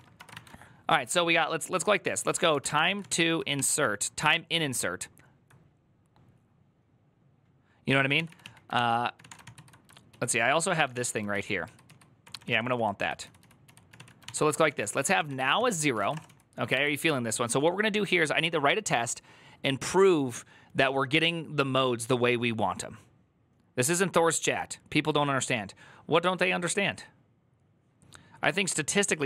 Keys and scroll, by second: 0.0-0.6 typing, 2.1-4.5 typing, 7.8-11.3 typing, 12.4 ctrl+d, 12.8-16.5 typing.